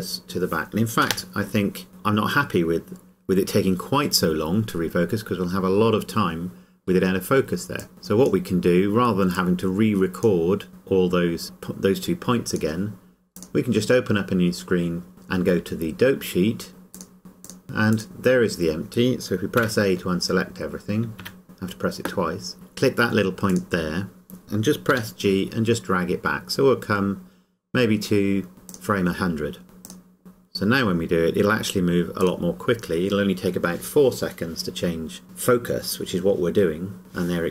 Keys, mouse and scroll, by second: 1.1 click, 7.8 click, 16.7 click, 17.4 click, 24.9 g, 28.7 click, 29.8 click, 30.5 scroll down 1, 32.2 click.